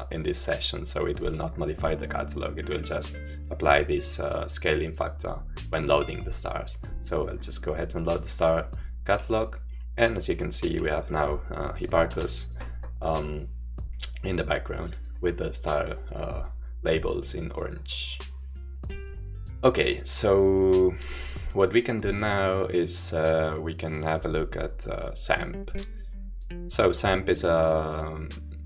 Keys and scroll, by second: 12.1 Home.